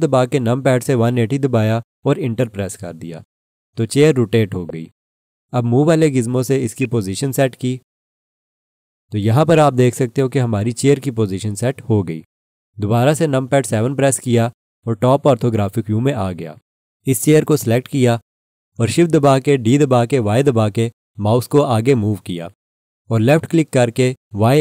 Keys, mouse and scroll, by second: 0.9-2.1 typing, 2.4 Return, 4.5 scroll up 1, 6.8 click, 9.5 alt+click, 13.5 7, 19.4 shift+d, 20.8 y, 23.2 click.